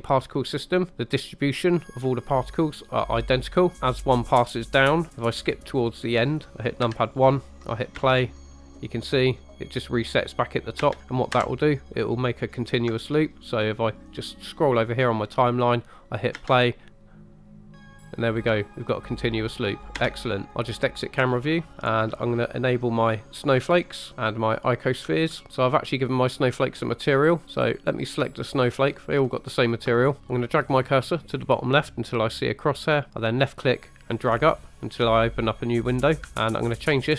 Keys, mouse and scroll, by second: 4.8-5.6 scroll down 2, 6.1 click, 6.8 KP_1, 8.0 space, 10.8 space, 11.4 KP_0, 11.5 click, 14.4 click, 16.4 space, 20.1 space, 20.5 scroll down 1, 20.5 KP_0, 20.8 middle click, 21.3-21.7 scroll down 2, 21.8 shift+middle drag, 23.1 middle click, 23.6 click, 24.5-25.0 drag, 25.5 shift+middle click, 25.5 scroll down 1, 27.3 click, 28.1 click, 33.1 click, 36.0-36.4 scroll down 2, 36.3 shift+middle click.